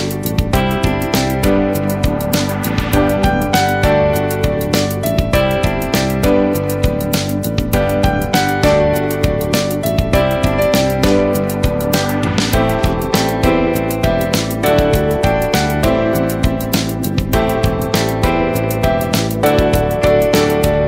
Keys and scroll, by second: 0.8 ctrl+space, 1.3 ctrl+space, 11.4 ctrl+z, 19.1 ctrl+z.